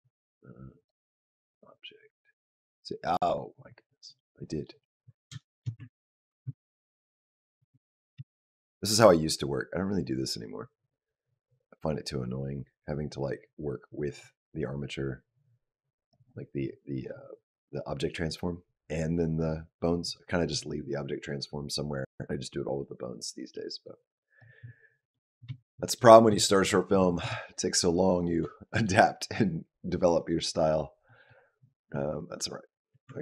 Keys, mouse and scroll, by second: 0.6 click, 1.3 click, 2.3 click, 3.7 middle click, 4.8-5.3 scroll up 3, 5.2 shift+middle click, 5.7 ctrl+middle click, 6.4 shift+middle click, 6.8 shift+middle click, 7.1 shift+middle click, 7.6 ctrl+middle click, 8.1 shift+middle click, 8.2-8.7 shift+scroll down 1, 9.0 click, 23.7 click, 24.9 middle click, 25.4 shift+middle click, 25.7 middle click, 26.0 scroll down 1, 26.2 shift+middle click, 26.6-27.0 scroll down 2, 27.1 shift+middle click, 27.9 middle click, 28.5 shift+middle click, 29.3 scroll up 1, 30.9 middle click, 32.9 Tab.